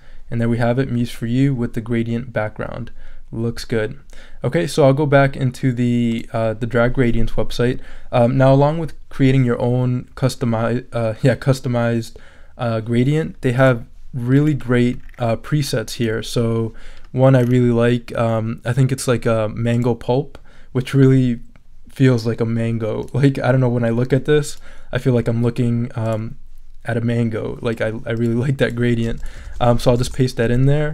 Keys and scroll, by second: 29.4 super+a, 29.9 super+v, 30.0 super+Return.